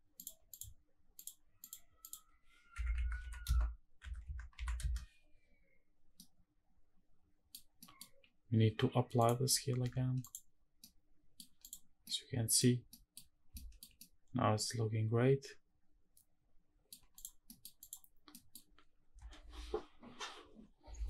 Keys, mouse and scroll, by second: 0.2 click, 0.8 click, 1.3 click, 1.7-4.5 drag, 5.8-7.2 middle drag, 7.4 scroll down 1, 7.5 middle drag, 8.9 click, 9.3 ctrl+a, 10.5-11.1 middle drag, 11.3 click, 11.6 scroll down 1, 11.7-12.3 middle drag, 12.6 scroll down 1, 12.6 middle drag, 13.2 shift+middle drag, 13.7-16.6 middle drag, 16.8 click, 17.1 middle click, 17.5 click, 17.9 scroll up 1, 18.0 middle click, 20.3-20.8 scroll down 4, 20.7 scroll up 1, 20.9 shift+`.